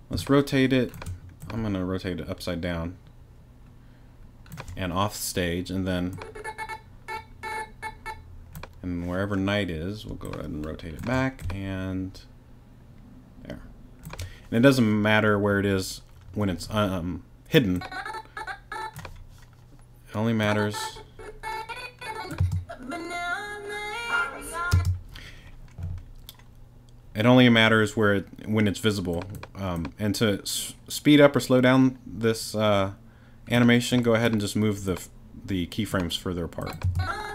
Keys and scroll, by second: 22.4 space, 24.7 space, 36.8 space.